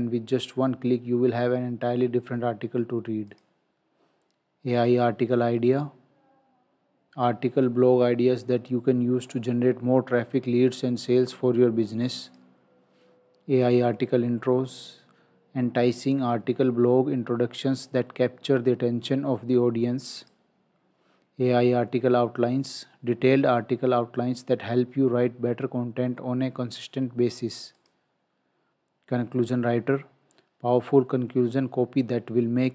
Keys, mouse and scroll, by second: 3.3 click, 12.3 click, 20.2 click, 27.8 click.